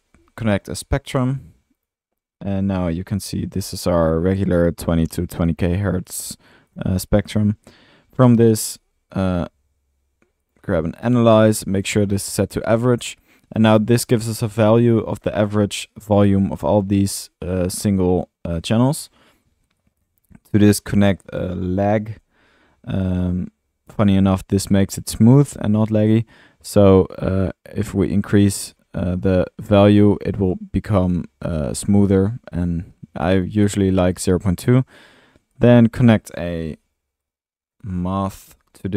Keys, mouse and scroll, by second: 0.0-1.3 typing, 2.6 click, 2.7 click, 5.6-6.1 drag, 6.8 click, 7.4 middle click, 8.3 Tab, 8.3 click, 8.5-9.2 typing, 15.0 click, 15.2-15.6 middle drag, 18.7 drag, 19.1 click, 19.8 scroll up 1, 20.0 middle click, 20.2 click, 20.7-21.2 drag, 21.3 Tab, 21.3 click, 21.5-22.5 typing, 23.3 middle click, 26.1-26.4 drag, 26.9-29.3 middle drag, 34.7-35.1 middle drag, 36.2 click, 37.8 Tab, 38.2-38.9 typing.